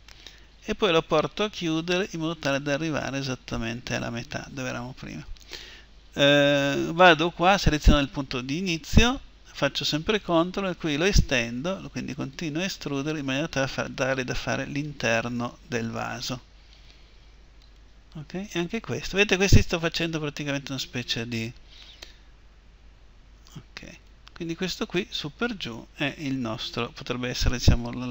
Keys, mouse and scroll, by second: 6.7-10.2 right drag, 10.9-28.1 drag.